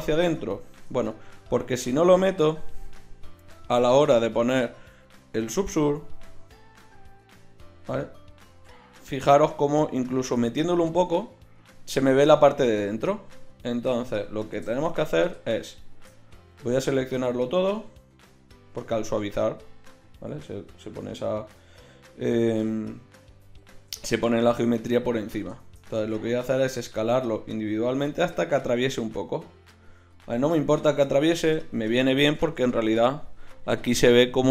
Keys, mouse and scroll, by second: 1.1 Tab, 15.3 Tab, 16.7 a, 17.2 a, 26.7 s.